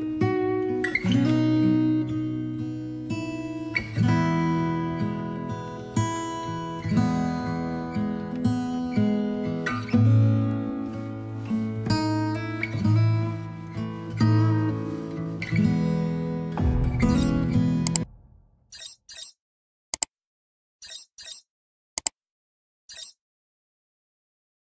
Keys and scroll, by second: 0.0 ctrl+z, 0.4 v, 7.9 ctrl+alt+shift+e.